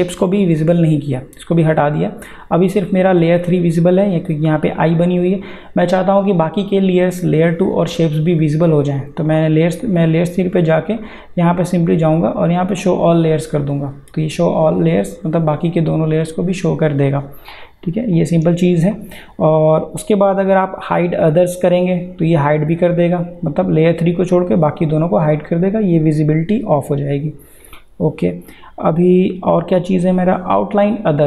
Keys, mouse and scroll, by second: 0.5 click, 9.3 click, 18.1 click, 22.4 click, 27.6 click.